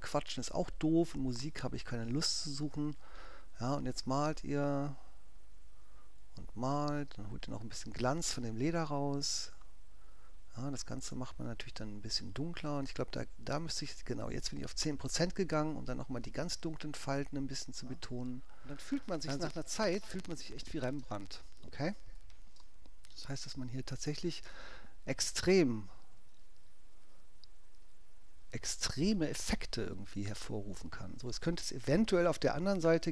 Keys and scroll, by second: 5.4 alt+^, 7.8 x, 12.0 x, 13.0 i, 21.1 space, 22.2 3, 22.6 space, 31.9 x, 32.4 ctrl+x.